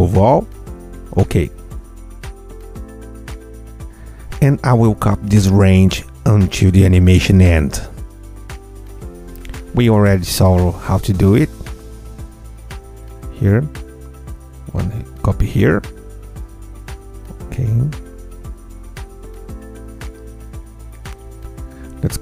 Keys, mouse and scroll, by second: 0.2 click, 0.7 Tab, 1.7 click, 2.5 ctrl+a, 3.6 F8, 8.2-9.7 ctrl+drag, 10.6-12.6 alt+drag, 13.4-15.9 ctrl+drag, 16.7 alt+click, 19.1 ctrl+alt+z, 19.5 ctrl+click, 20.2 ctrl+click, 20.3 ctrl+a, 21.2-22.2 ctrl+drag.